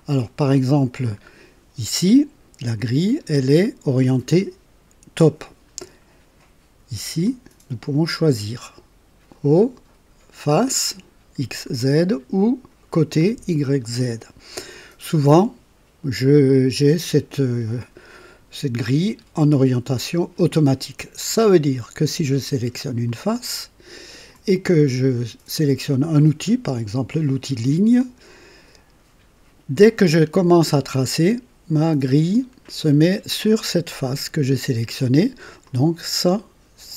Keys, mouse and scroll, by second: 0.3-1.4 drag, 7.2 click, 20.3 click, 21.4-22.2 drag, 23.0 click, 27.9 click, 35.6-36.9 drag.